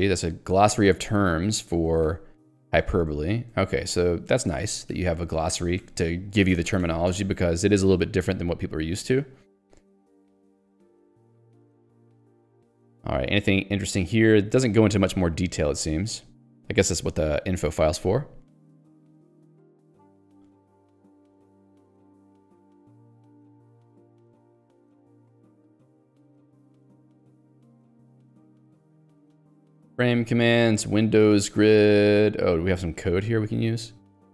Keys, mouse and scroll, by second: 1.7 click, 2.8 ctrl+d, 8.3 q, 9.5 j, 11.1 ctrl+d, 15.5 j, 22.0 ctrl+d, 32.1 ctrl+u, 33.6 k.